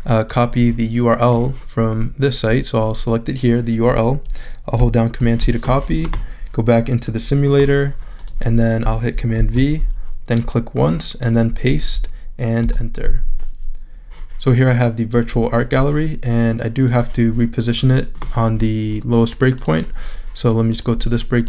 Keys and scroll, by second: 5.2 super+c, 9.4 super+v, 12.6 Return.